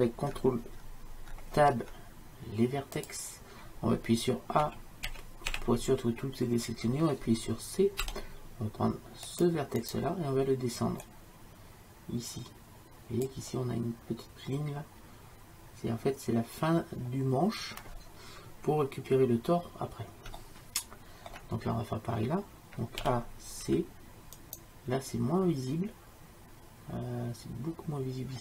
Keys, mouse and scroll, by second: 1.6 ctrl+Tab, 4.7 a, 5.1 a, 5.6 a, 8.1 c, 11.1-13.3 drag, 20.5-23.1 middle drag, 23.1 a, 23.7 c, 24.6-26.4 drag.